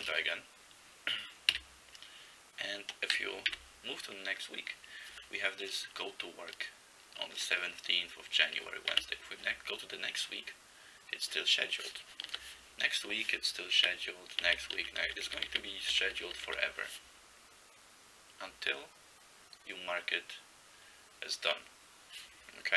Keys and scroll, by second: 0.0-0.3 typing, 1.6 a, 3.6 f, 9.0 f, 12.4 f, 13.8-16.5 typing.